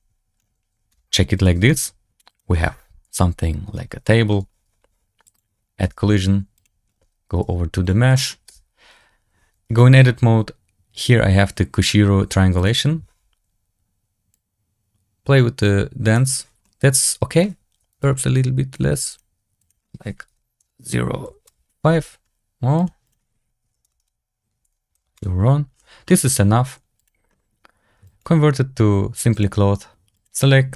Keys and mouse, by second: 0.8 s, 1.5 ctrl+a, 3.0 KP_Decimal, 3.9 shift+drag, 4.0 shift+middle drag, 5.1 click, 5.7 shift+a, 7.3 g, 8.2 click, 8.4 Tab, 12.5 click, 14.2-16.0 drag, 16.5 middle click, 18.0 shift+click, 19.0-21.5 drag, 22.7-25.2 drag, 23.9 KP_0, 26.0 click, 27.9 click, 30.0 click.